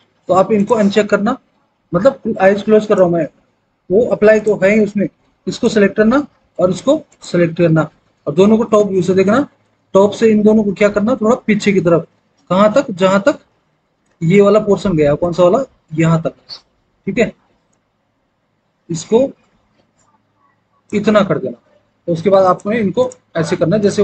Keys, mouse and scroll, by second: 8.5 alt+w, 9.2 alt+w, 13.5 alt+w, 14.0 alt+w.